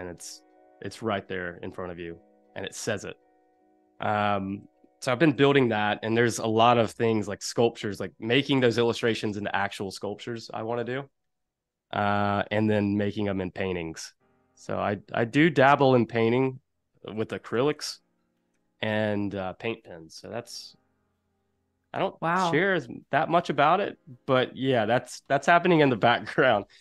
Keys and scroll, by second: 5.4 shift+super+[, 6.0 a, 7.0 i, 7.6 a, 9.1 space, 11.7 p, 17.6 shift+super+[, 18.5 a, 20.1 space, 21.4 super+y, 22.0 p.